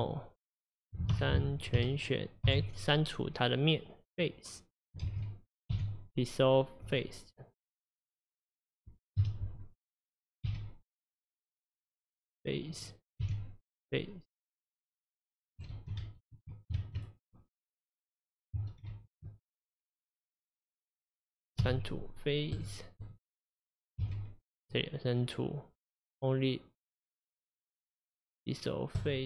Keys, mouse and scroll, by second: 0.0 Tab, 1.1 3, 1.8 a, 2.5 x, 5.1 ctrl+z, 5.7 x, 8.3 click, 9.2 KP_Divide, 9.9-10.5 scroll down 1, 10.5 x, 12.8 click, 13.2 x, 14.6 click, 15.0-15.7 scroll down 1, 15.7 ctrl+z, 16.0 ctrl+z, 16.8 ctrl+z, 17.7 middle click, 18.3 click, 18.8 ctrl+z, 19.6 click, 20.3 middle click, 20.8 click, 21.6 x, 23.0 click, 24.1 x.